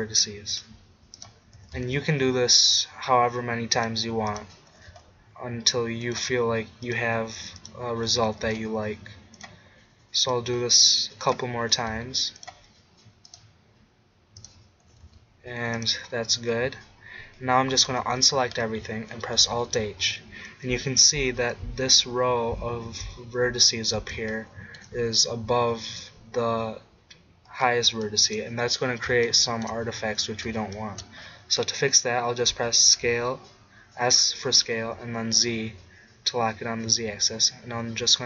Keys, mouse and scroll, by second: 1.6 g, 2.2 middle click, 4.7 g, 4.9 click, 5.8 middle click, 6.2 click, 7.7-8.8 drag, 8.3 g, 9.5 click, 11.7 g, 12.1 middle click, 14.8 g, 15.9-17.5 drag, 17.9 a, 19.4 alt+h, 29.4-35.6 drag, 32.4 s.